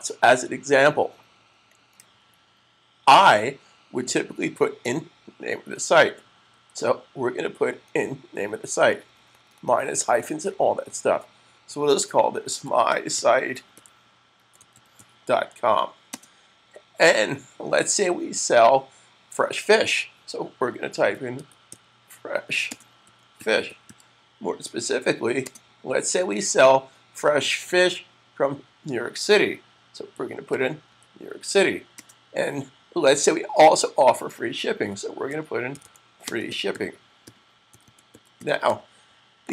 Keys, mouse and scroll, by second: 6.2 super+v, 11.8-16.0 typing, 19.0 typing, 20.2-24.2 typing, 25.3 typing, 29.8-30.8 typing, 31.8 typing, 34.4-39.5 typing, 39.3 click.